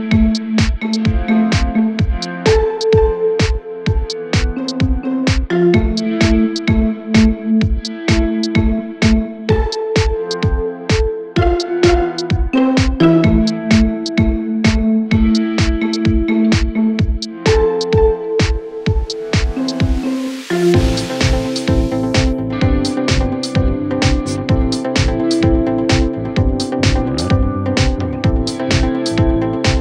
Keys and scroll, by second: 0.5 F3, 0.8 ctrl+s.